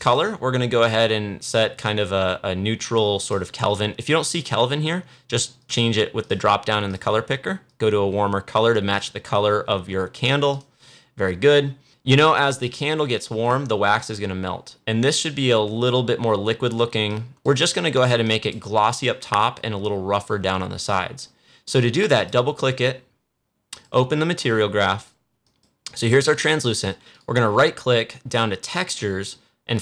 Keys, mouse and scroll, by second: 12.2 click, 12.9-14.7 scroll down 1, 17.0 click, 20.7 click, 27.0 right click.